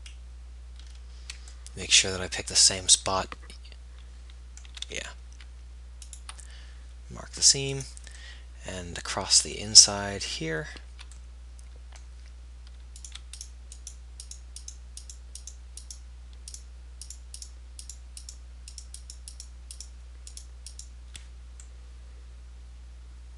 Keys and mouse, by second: 7.9-10.3 drag, 13.1-23.3 middle drag.